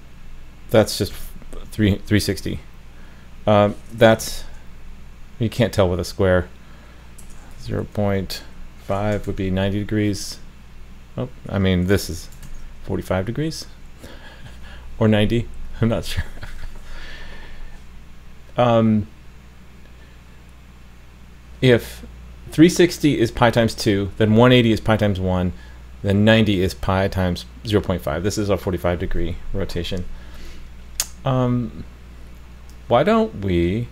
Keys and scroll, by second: 1.1 super+s, 4.2 super+s, 9.3 super+s, 12.5 super+s.